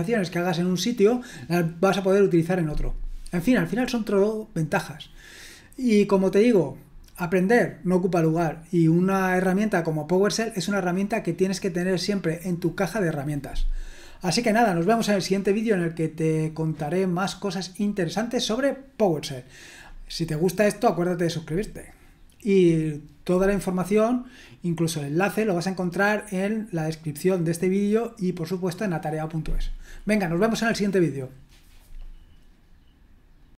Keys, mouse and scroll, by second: 33.4 click.